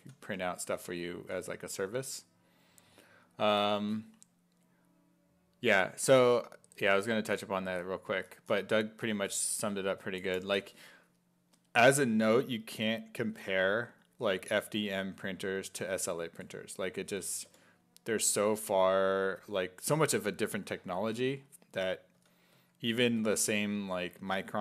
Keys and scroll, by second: 0.0-1.2 typing, 13.2 s, 13.7 1, 15.3 1, 17.1 s, 17.5 5, 19.1 s, 19.4 1, 22.0-23.7 typing.